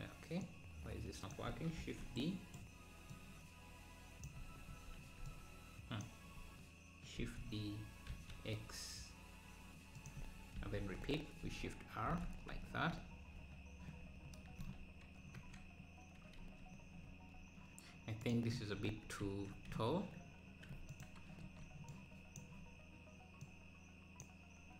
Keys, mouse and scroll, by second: 0.4 click, 1.8 shift+d, 3.2 click, 4.7 shift+r, 5.3 click, 7.2 shift+d, 10.6 shift+r, 10.8 shift+r, 11.0 shift+r, 11.5 shift+r, 12.5 Tab, 12.8 scroll down 2, 15.5 KP_Decimal, 18.3 click, 18.9 Tab, 19.9 z, 20.9 click, 21.4 KP_1, 22.4 click, 23.5 click.